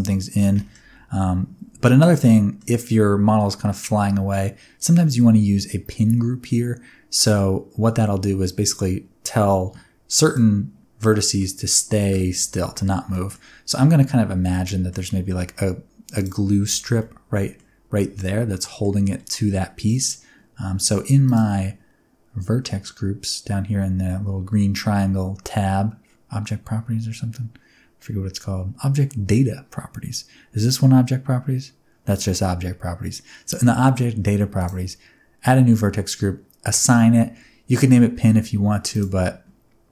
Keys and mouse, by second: 0.5 middle click, 2.2-2.5 middle drag, 10.2 click, 11.0 middle click, 13.1 middle click, 14.3 Tab, 14.6 middle click, 15.2 3, 16.7 alt+z, 16.9 middle click, 18.0 alt+z, 18.1 middle click, 21.2 click, 34.6 click, 36.7 click, 38.9 click.